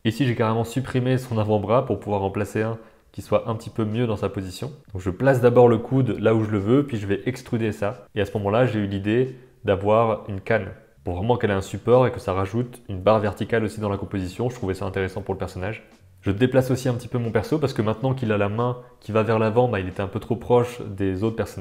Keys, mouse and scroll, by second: 0.0 middle click, 0.5 click, 1.3-8.2 typing, 1.6 middle click, 2.9 middle click, 3.2 middle click, 4.6 middle click, 6.2 middle click, 8.2-9.3 middle drag, 9.5 g, 9.7 middle click, 10.0 middle click, 10.4 middle click, 10.6 middle click, 10.9 click, 10.9 g, 11.3 middle click, 11.7 Tab, 11.8-12.9 middle drag, 13.1 middle click, 13.7 Tab, 13.8 middle click, 14.3 click, 14.4-16.4 typing, 15.6 middle click, 16.0 middle click, 17.0-17.4 middle drag, 17.5 g, 17.7 middle drag, 18.3 middle click, 18.5 Tab, 18.6 Tab, 18.8 middle drag, 19.1 middle click, 19.5 Tab, 19.9 Tab, 20.5 shift+click, 20.8 shift+a.